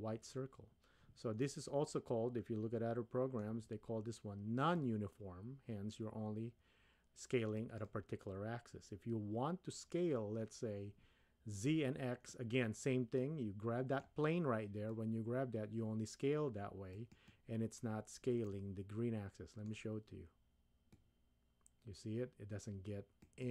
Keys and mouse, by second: 1.5-3.5 middle drag, 4.7-7.8 drag, 12.3-14.0 middle drag, 14.9-17.2 drag, 18.4-19.8 middle drag, 20.9-23.5 drag.